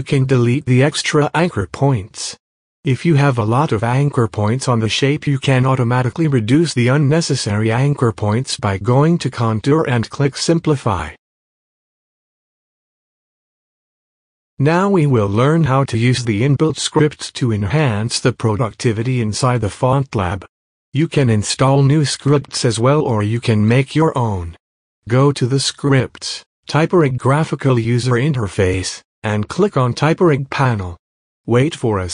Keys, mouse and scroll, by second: 0.3 scroll down 2, 0.6 click, 0.9 Left, 2.0 space, 2.1 click, 2.8 p, 3.1 click, 7.4-9.3 drag, 12.1 click, 13.8-16.1 drag, 16.1 space, 16.3 click, 16.3 space, 16.8-18.4 drag, 18.5 space, 18.6 click, 18.7 space, 18.9 scroll down 1, 19.2 alt+scroll up 1, 19.4 click, 19.6 click, 19.7 space, 20.7 click, 21.8 click, 23.1 space, 23.2 click, 23.3 space, 24.5 click.